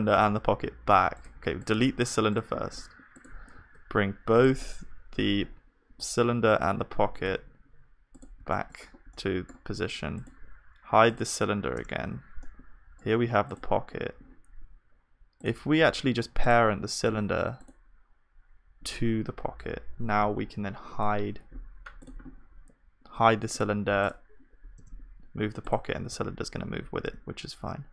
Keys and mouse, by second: 2.0-5.9 drag, 4.3 b, 5.9 g, 10.2-20.5 drag, 11.8 h, 12.6 right click, 20.5 ctrl+p, 23.6-27.9 drag, 24.8 h, 26.0 g.